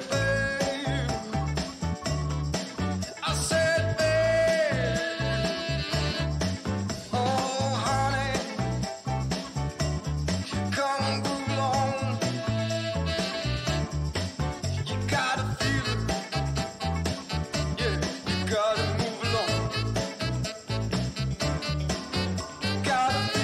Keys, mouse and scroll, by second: 2.3-7.0 scroll up 2, 2.8-4.4 middle drag, 5.8-7.8 middle drag, 7.0-8.6 scroll down 2, 9.4-11.6 drag, 12.2-14.0 middle drag, 12.2-14.0 scroll down 2, 16.0-16.8 scroll up 2, 18.8 middle click, 18.8-20.2 scroll down 2, 20.4-21.2 scroll up 2, 21.4-22.8 middle drag, 21.4-23.4 scroll down 5, 23.1 middle click.